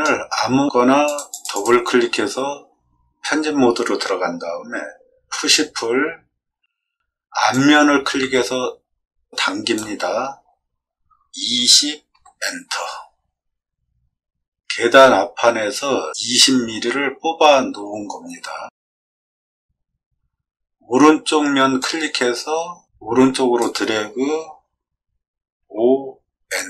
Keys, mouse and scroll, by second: 1.0 click, 1.2 click, 5.3 p, 7.5-9.7 drag, 11.4 0, 12.1 Return, 21.8-23.5 drag, 25.6 5, 26.4 Return.